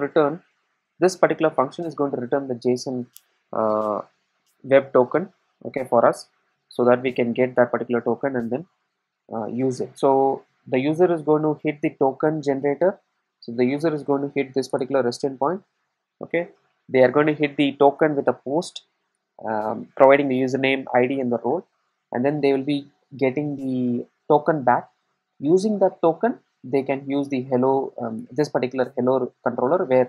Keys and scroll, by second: 0.0 Return, 14.8 Return.